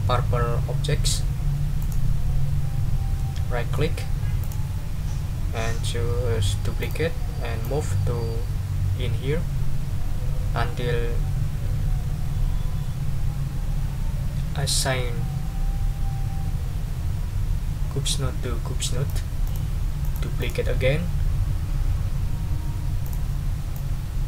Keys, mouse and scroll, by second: 1.8 right click, 3.1 middle click, 3.8 click, 4.4 right click, 6.8 click, 7.6-19.3 drag, 19.4 click, 20.0 click, 23.0 click, 23.7-24.2 drag.